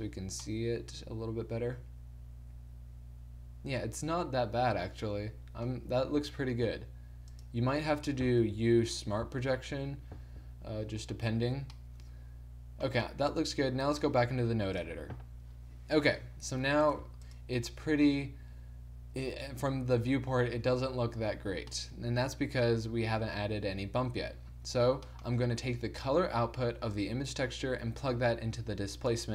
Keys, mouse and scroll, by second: 0.3 Tab, 6.2 Tab, 6.8 s, 8.4 u, 12.1 Tab, 17.2 g, 27.1-29.0 drag.